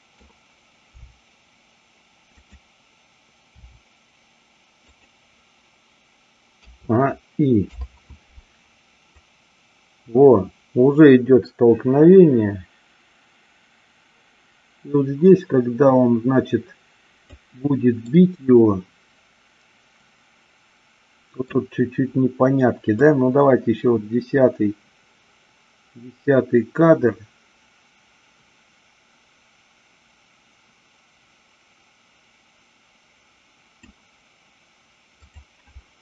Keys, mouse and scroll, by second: 1.0 g, 2.4 click, 3.5 r, 4.9 click, 7.7 i, 9.3-17.3 drag, 18.0-21.5 middle drag, 22.9-33.8 drag, 35.3-36.0 drag.